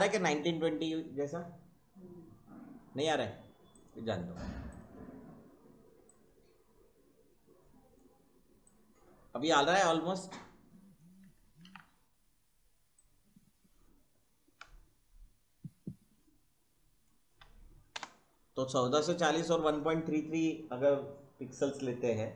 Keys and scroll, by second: 0.2 ctrl+-, 11.6 ctrl+t, 17.9 Return.